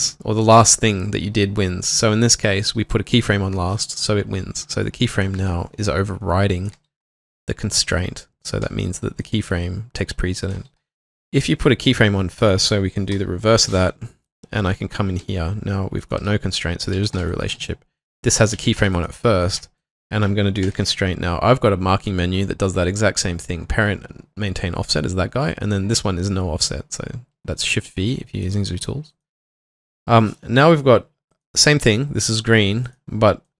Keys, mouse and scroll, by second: 5.4 typing, 6.5-7.2 typing, 8.4-9.2 typing, 10.3-11.3 typing, 15.2-17.2 typing, 16.6 double click, 18.3-19.0 typing, 20.7 v, 22.5 shift+click, 29.6 typing, 33.4 double click.